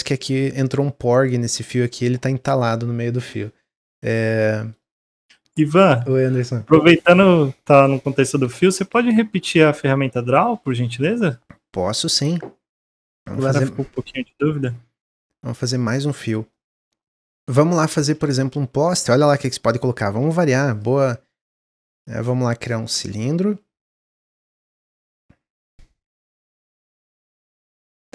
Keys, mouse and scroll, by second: 4.1 scroll down 3, 4.4-9.0 middle drag, 13.7-14.2 middle drag, 14.2-14.6 scroll up 1, 14.6-15.2 middle drag, 15.2-15.5 scroll down 2, 15.5-18.1 middle drag, 18.1 shift+a, 21.0-22.8 scroll down 1, 22.8-24.0 drag, 24.8 middle click, 25.5 click.